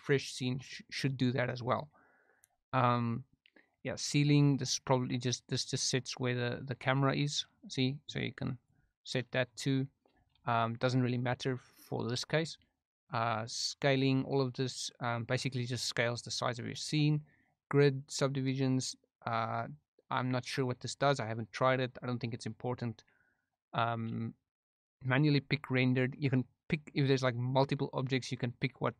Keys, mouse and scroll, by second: 6.9-8.6 drag.